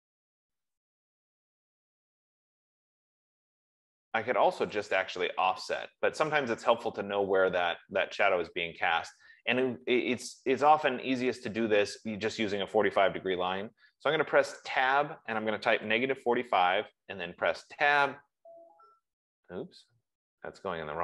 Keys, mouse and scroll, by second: 0.0-0.3 typing, 1.7-4.0 middle drag, 1.7 typing, 5.3-10.2 drag, 14.9 Tab, 15.8-17.0 typing, 17.9 Tab.